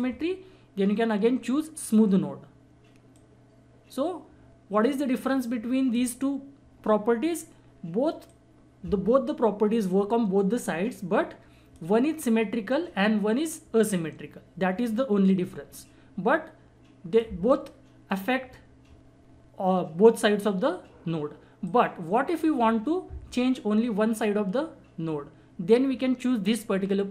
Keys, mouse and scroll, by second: 1.8 click, 8.3 click, 15.3-19.9 drag, 21.6 click, 21.7-24.9 drag.